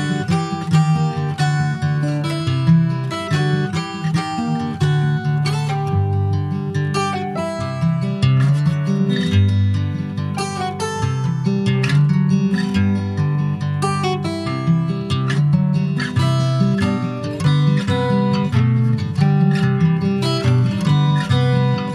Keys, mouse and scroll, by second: 0.6 Tab, 0.7 click, 1.0 scroll down 5, 1.2 shift+middle click, 1.8 middle click, 2.2 ctrl+s, 2.3 click, 2.6 Tab, 2.7 scroll up 1, 2.9 middle click, 3.5 click, 4.4 3, 4.6 click, 5.1 alt+middle click, 5.6 alt+middle click, 6.7 ctrl+s, 7.0-7.3 scroll down 1, 7.3 shift+middle click, 8.3 click, 10.1-10.4 scroll down 5, 10.4 shift+middle click, 11.1 click, 13.6 scroll up 4, 13.8 shift+middle click, 14.6 scroll up 2, 14.8 shift+middle click, 16.3 click, 17.5 click, 18.3 e, 19.7-20.0 scroll up 3, 20.0 middle click, 20.9 click, 21.6 alt+shift+click.